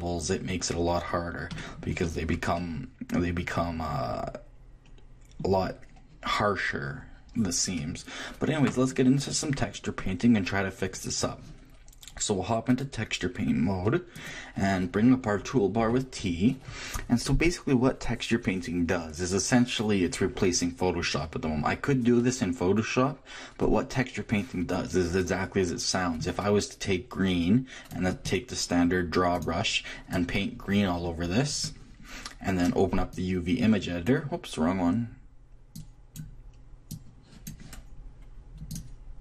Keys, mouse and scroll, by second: 7.3-11.8 middle drag, 12.7-14.6 drag, 15.9 t, 25.7 middle click, 26.8-30.0 drag, 30.4-31.9 drag, 33.1-34.9 drag, 35.8-39.2 drag.